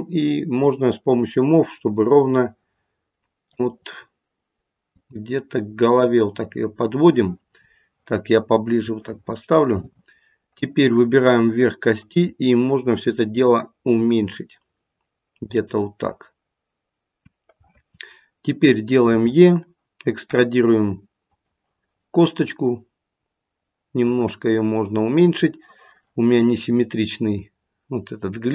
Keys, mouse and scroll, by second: 1.2 click, 2.2 click, 4.8 click, 7.6-8.8 scroll up 4, 9.1 shift+middle click, 9.7 shift+middle click, 10.5 click, 12.0 click, 19.1 e, 24.1 click, 27.9-28.5 scroll down 3.